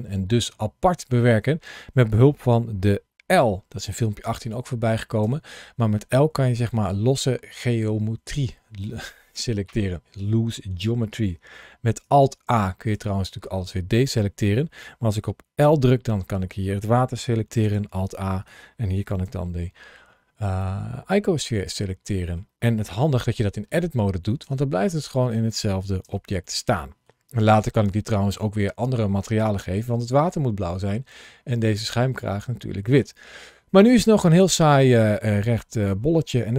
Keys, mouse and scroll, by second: 2.5 l.